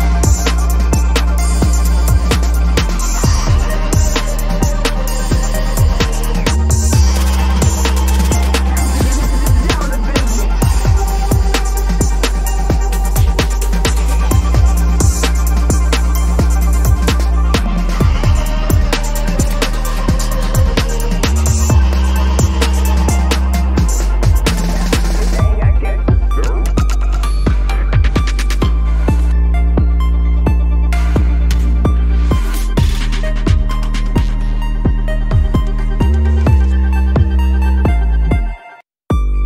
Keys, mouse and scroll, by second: 3.3 double click, 3.7 ctrl+z, 3.8 ctrl+z, 4.2 typing, 4.4 ctrl+=, 4.9 ctrl+alt+z, 5.0 ctrl+alt+z, 6.4 ctrl+-, 6.8 double click, 6.8 space, 7.5 right click, 9.1 right click, 9.3 ctrl+-, 9.5 ctrl+-, 9.6 ctrl+-, 10.0 ctrl+-, 10.7 ctrl+=, 10.9 ctrl+=, 13.1-14.6 scroll up 1, 23.0 double click, 24.8 typing, 26.8 double click, 27.7 ctrl+c, 29.4 double click, 30.1 typing, 31.6 ctrl+-, 31.7 ctrl+-, 31.8 ctrl+-, 32.5 ctrl+=, 32.7 ctrl+=, 32.8 ctrl+=, 33.0 ctrl+=, 33.4 space, 34.3 ctrl+=, 34.5 ctrl+=, 34.9 space, 35.7 ctrl+=, 36.1 space, 36.8 ctrl+=, 37.1 space, 37.8 ctrl+=, 38.1 space.